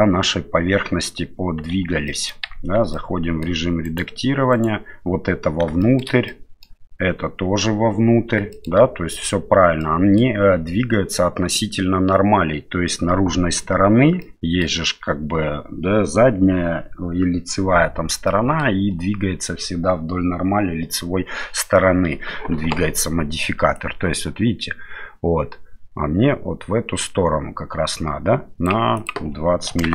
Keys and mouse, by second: 1.7 shift+z, 2.1 middle click, 2.5 Tab, 2.9 middle click, 3.8 right click, 4.5 right click, 5.8 shift+middle click, 6.3 middle click, 8.5 shift+middle click, 9.8 middle click, 14.2 middle click, 18.3 middle click, 23.8-28.8 drag, 29.1-29.9 drag.